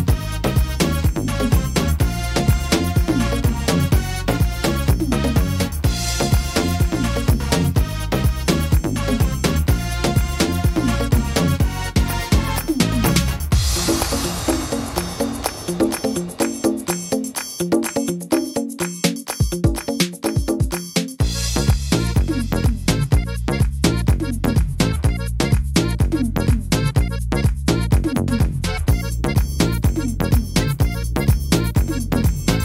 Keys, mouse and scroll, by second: 0.0 middle click, 3.9 click, 5.6 s, 7.6 click, 10.1 ctrl+r, 11.6 s, 13.6 click, 15.4 middle click, 15.7-16.2 scroll down 2, 16.3 shift+middle click, 16.7 middle click, 17.2-17.9 scroll up 2, 17.9 right click, 18.6 shift+right click, 19.0 shift+middle click, 20.0 shift+right click, 20.5 shift+right click, 21.5 click, 23.9 middle click, 24.4 middle click, 25.3 right click, 26.0 shift+right click, 26.4 shift+middle click, 27.3 shift+right click, 27.7 scroll down 2, 28.7 click, 30.7 scroll down 2, 31.1 middle click, 31.5 shift+scroll up 1, 31.8 shift+middle click, 32.2 scroll up 1.